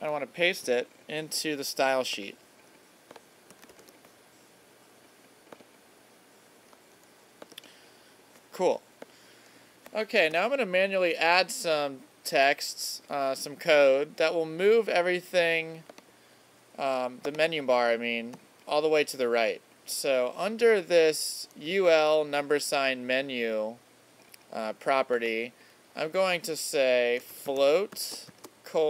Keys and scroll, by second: 3.7 super+v, 10.4 alt+super+=, 18.3 Return, 28.3 shift+;.